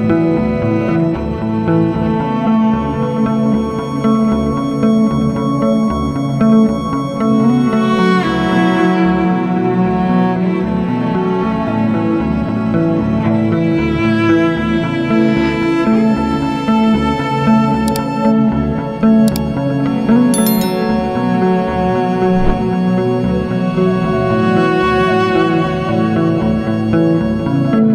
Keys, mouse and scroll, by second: 5.7 double click, 7.6 ctrl+r, 8.1 click, 10.0 click, 11.0-11.5 scroll up 1, 11.5 ctrl+click, 13.6-14.1 scroll down 1, 14.1 click, 14.7-15.0 scroll down 1, 15.0-15.4 scroll up 1, 15.4 click, 16.4 click, 16.8 ctrl+o, 17.6 click, 21.4 click, 22.5 click, 24.5 click, 25.5 F4, 26.0 click, 27.0 F9.